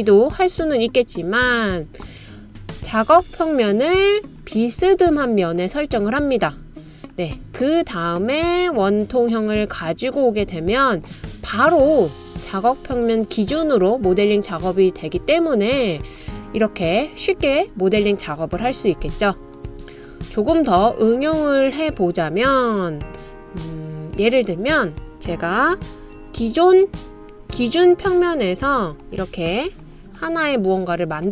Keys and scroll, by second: 27.4 super+c, 27.9 super+v, 29.0 super+v, 29.3 super+v.